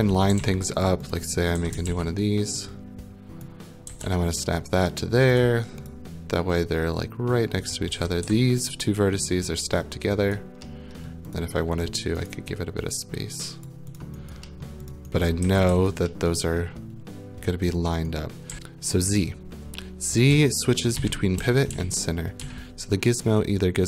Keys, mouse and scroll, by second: 0.0-1.6 typing, 0.8 right click, 1.1 click, 1.5 right click, 1.9 ctrl+d, 3.4 click, 3.6-5.8 typing, 5.3 click, 5.9 click, 8.0 typing, 8.7 right click, 10.4 right click, 11.1 middle click, 11.4 click, 11.8 middle click, 12.2 scroll, 12.3 right click, 13.6 click, 14.0 click, 14.3 right click, 14.6 scroll, 14.9 click, 15.2-19.0 typing, 15.9 right click, 16.6 middle click, 18.5 right click, 20.3-22.4 typing.